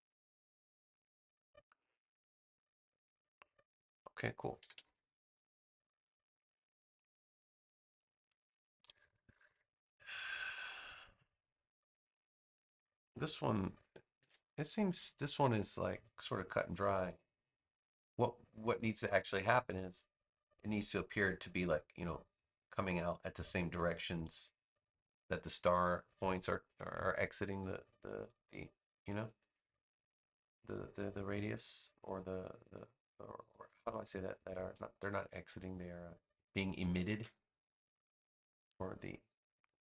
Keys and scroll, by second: 4.5 super+-, 5.5 space, 14.1 super+v, 26.1 space, 37.0 super+z.